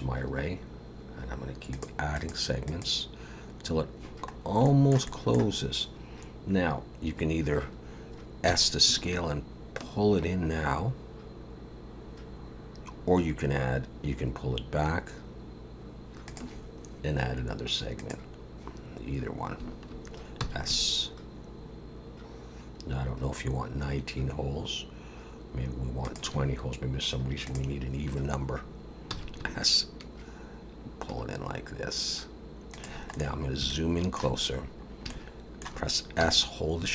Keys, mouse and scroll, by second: 1.8 click, 2.1 click, 2.6 click, 4.4 scroll up 1, 4.6 shift+middle click, 5.0 middle click, 8.4 s, 17.9 click, 20.4 s, 27.4 click, 29.2 s, 33.1 middle click, 33.2 scroll up 1, 33.7 shift+middle click, 34.4-35.1 scroll up 4, 35.1 shift+middle click, 36.2 s.